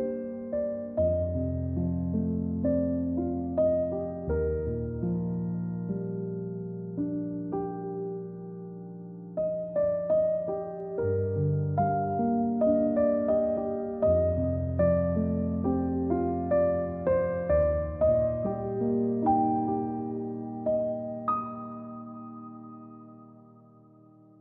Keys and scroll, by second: 0.0-0.7 typing, 1.8-2.2 space, 3.1 a, 5.3 c, 7.5-9.4 typing, 11.0 c, 16.1-17.3 typing, 20.2 z, 20.9 space, 21.8 a.